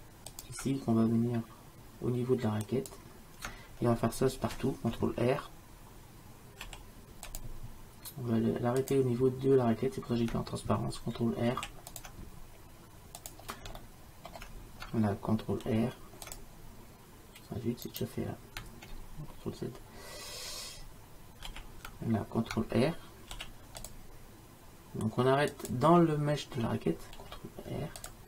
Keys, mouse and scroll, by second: 6.7 ctrl+r, 11.6 ctrl+r, 13.9 middle click, 15.7 ctrl+r, 21.6 ctrl+z, 23.4 ctrl+r, 27.2 ctrl+r.